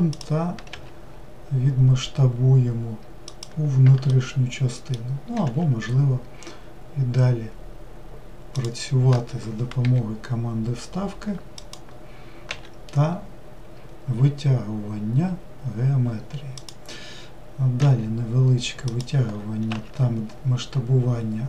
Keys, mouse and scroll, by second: 4.1-5.4 middle drag, 5.4 e.